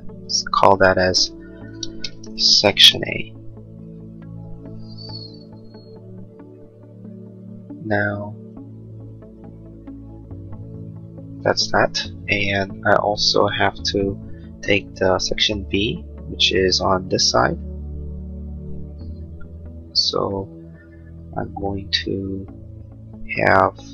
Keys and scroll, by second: 3.8 Return.